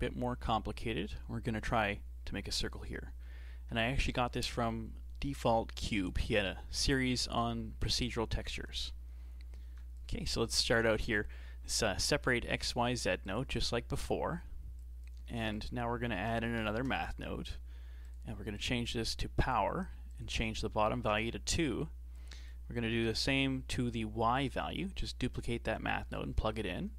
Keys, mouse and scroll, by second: 9.7 shift+a, 13.8-14.8 shift+middle drag, 14.8 click, 15.3 shift+a, 18.6-23.0 drag, 23.0 shift+d, 24.4 click, 26.5-26.9 shift+middle drag.